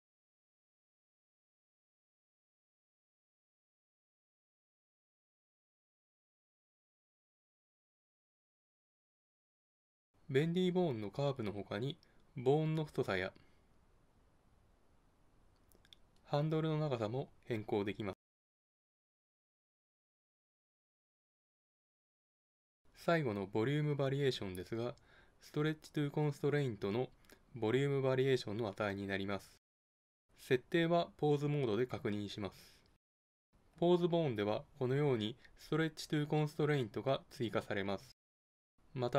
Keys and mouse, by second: 2.8-4.0 middle drag, 6.5-8.8 middle drag, 12.7-14.4 drag, 18.3-19.9 drag, 30.2 Tab, 33.2-34.9 drag.